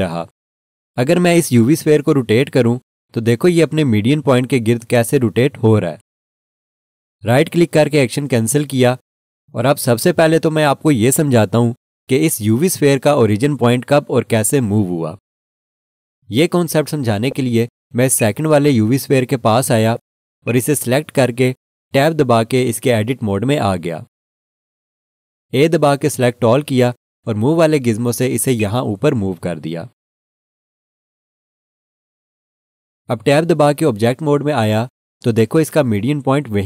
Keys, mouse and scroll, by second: 3.4 r, 7.9 right click, 16.9 scroll down 1, 17.8-18.1 scroll, 18.2 alt+shift+click, 19.2 click, 19.7 scroll up 1, 20.2 scroll, 20.4 alt+shift+click, 22.8 Tab, 26.8 a, 28.6 click, 34.3 Tab.